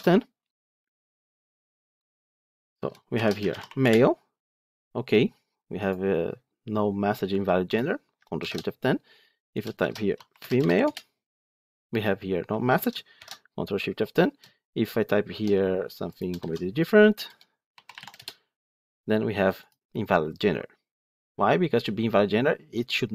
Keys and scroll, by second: 8.3 ctrl+shift+F10, 13.1 ctrl+shift+F10.